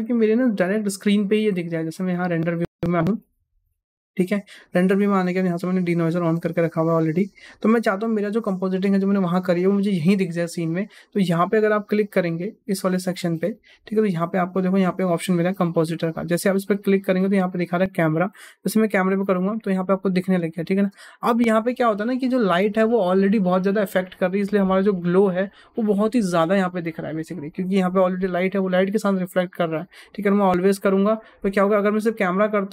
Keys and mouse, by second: 12.8-32.4 drag.